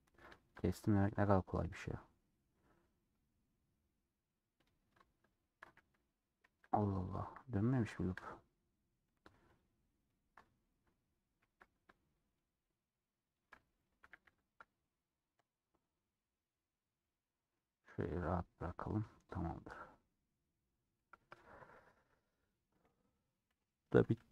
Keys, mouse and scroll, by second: 0.6-1.4 scroll up 5, 1.8 click, 3.1-4.8 middle drag, 4.8 click, 6.4 alt+z, 7.2 ctrl+click, 7.3-9.2 middle drag, 9.4-10.6 ctrl+drag, 11.5 ctrl+z, 12.4 shift+click, 13.4 shift+click, 14.1 a, 16.6-17.0 scroll down 1, 17.0 middle click, 17.5 scroll down 2, 17.7-19.6 middle drag, 19.6 scroll down 1, 20.3 scroll up 1, 20.4-22.1 middle drag, 22.1 scroll down 2, 22.5 scroll up 1, 23.4 /, 24.0 Tab, 24.2 scroll down 2.